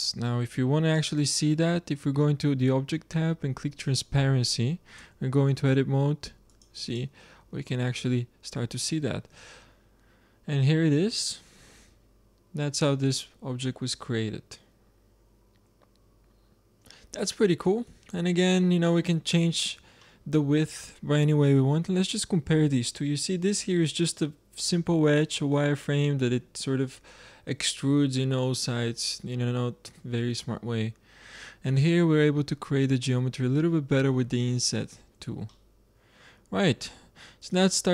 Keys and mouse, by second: 0.8-2.7 drag, 2.7-3.7 middle drag, 3.7-5.6 drag, 4.9 Tab, 5.6-7.4 middle drag, 7.6 click, 7.7 middle drag, 7.8 click, 7.9 middle click, 8.0 click, 8.1 middle click, 8.2 click, 8.3 middle click, 8.4 click, 8.5 middle click, 8.6 click, 8.7 middle click, 8.8 click, 9.1 shift+z, 18.0 z, 18.5-21.9 drag, 20.6 z, 32.1-35.4 middle drag.